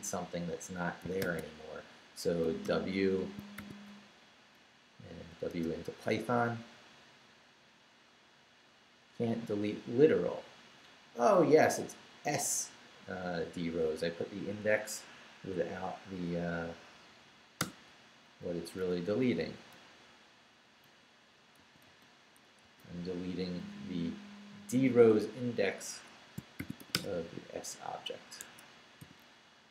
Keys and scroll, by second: 1.2 shift+;, 2.4 shift+w, 2.6 Return, 3.4 shift+Return, 3.5 shift+;, 4.2 shift+Up, 5.5 Return, 17.6 Return, 18.2 Up, 19.7 Left, 21.6 i, 21.8 -, 22.6 s, 23.8 Right, 26.3-27.3 typing, 28.4 Escape, 29.0-29.7 typing.